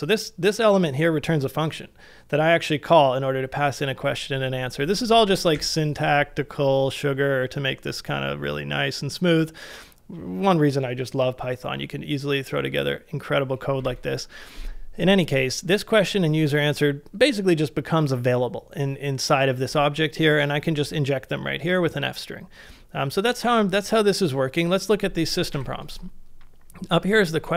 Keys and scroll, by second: 5.3 shift+3, 5.6 shift+3, 13.8 e, 25.6 shift+3.